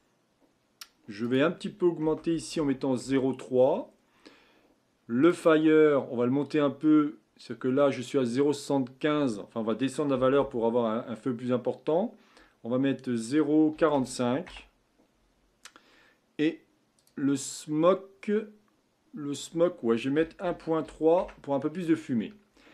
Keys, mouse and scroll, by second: 3.7-5.2 scroll down 4, 5.2-11.7 drag, 16.9-20.1 drag.